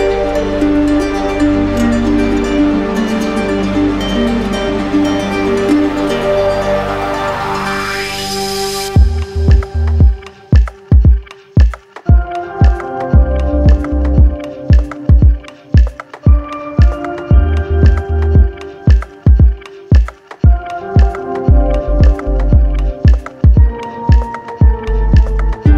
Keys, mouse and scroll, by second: 0.3 ctrl+z, 2.7 ctrl+z, 5.5 ctrl+z, 8.1-10.1 right drag, 10.5-11.5 drag, 12.4 click, 13.3 alt+click, 14.0 shift+right click, 15.3 click, 16.2 click, 17.0 alt+click, 17.8 alt+click, 17.8 click, 18.2 click, 18.7 right click, 19.9 alt+right click, 22.5 click.